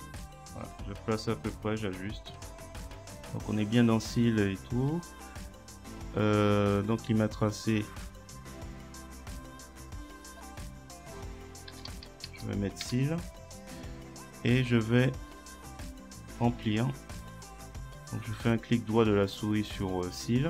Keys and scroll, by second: 11.5-12.8 typing, 12.9 Return.